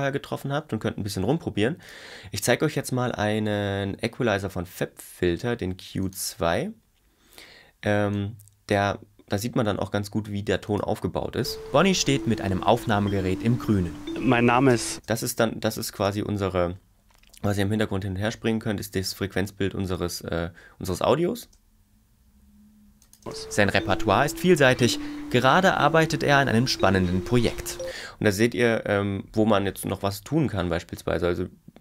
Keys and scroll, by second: 11.4 space, 15.0 space, 21.4 space, 23.2 space, 27.8 space.